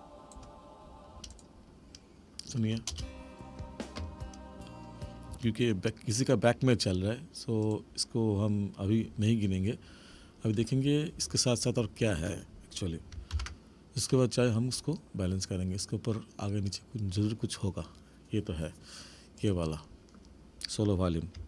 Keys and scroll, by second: 1.1 space, 2.9 space, 5.4 space, 13.3 ctrl+=.